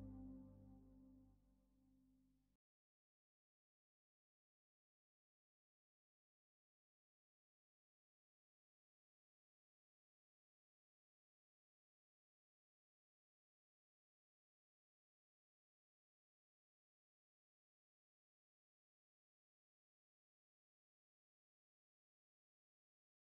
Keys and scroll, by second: 5.9 F3, 15.5 ctrl+z, 18.1 F3, 18.2 Escape, 19.8 Escape, 21.5 F3.